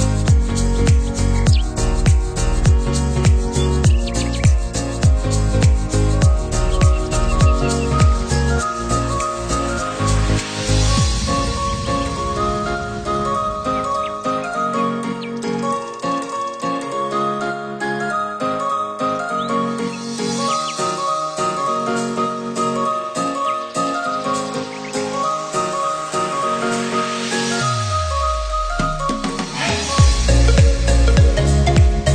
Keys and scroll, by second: 0.9 ctrl+=, 1.8 ctrl+-, 2.2 ctrl+0, 10.7 ctrl+c, 10.9 ctrl+v, 11.8 ctrl+=, 26.8 ctrl+-.